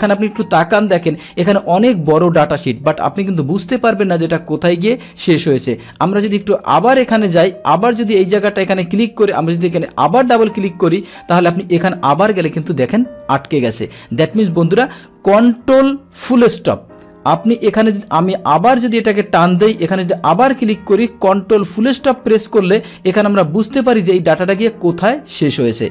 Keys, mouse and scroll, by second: 5.6-6.1 scroll down 1, 6.4 scroll down 1, 7.9 click, 10.2 click, 11.3-15.3 scroll down 1, 16.9-18.7 scroll down 1, 18.7 click, 20.0 click, 20.2 click, 24.6-25.9 drag.